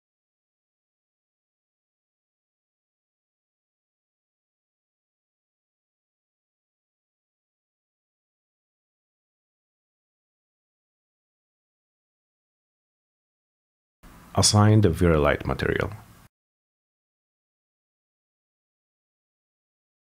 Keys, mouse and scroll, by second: 0.2 click, 0.5 click, 1.0 click, 1.6 click, 3.0 n, 3.9 click, 4.2 middle click, 4.3 m, 4.9 click, 5.4 click, 5.6 middle click, 5.7 m, 6.3 click, 6.4 click, 7.1 right click, 7.5 click, 8.3 click, 8.9 click, 9.6 click, 10.0 click, 11.4 click, 11.7 click, 12.2 click, 12.4 middle click, 12.6 middle click, 13.0 click, 13.5 click, 14.3 click, 14.7 middle click, 14.9 middle click, 15.2 m, 15.7 middle click, 16.1 click, 16.9 click, 17.8 click, 18.5 click, 18.9 click, 19.3 click.